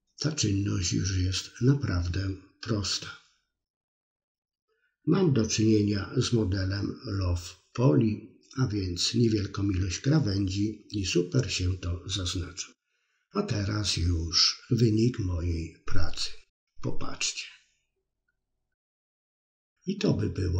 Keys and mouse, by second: 0.2 click, 0.4 middle click, 1.3-3.5 middle drag, 4.0 alt+h, 4.4 click, 4.5 middle click, 5.9 middle click, 6.9 middle click, 7.6 Tab, 9.6-10.2 drag, 11.0 click, 14.7 click, 15.1-16.9 drag, 19.5-20.5 drag.